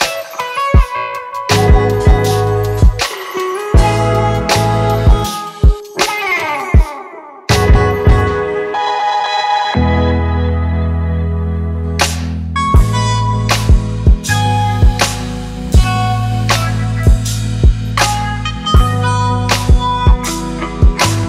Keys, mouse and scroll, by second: 12.0 alt+scroll up 1.